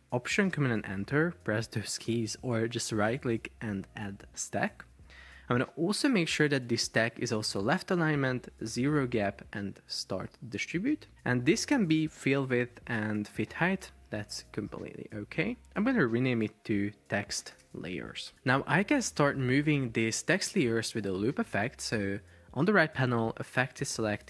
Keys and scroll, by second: 8.6 0, 8.8 Return, 16.7-18.7 typing.